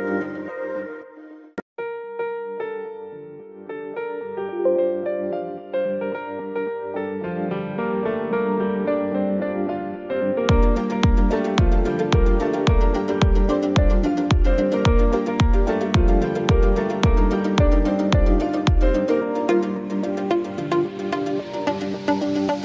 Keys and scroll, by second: 3.4 a, 9.7 shift+space, 11.1 space, 16.0 ctrl+a, 17.8-20.1 typing, 21.1 Caps_Lock, 21.6-22.6 typing.